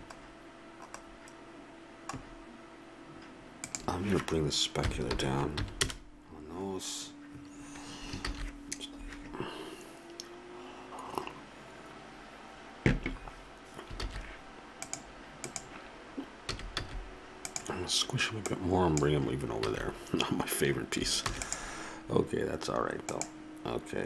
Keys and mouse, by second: 3.6-5.6 drag, 8.5 shift+z, 14.3 shift+z, 14.8 click, 16.5 s, 19.6 a, 21.2 ctrl+s.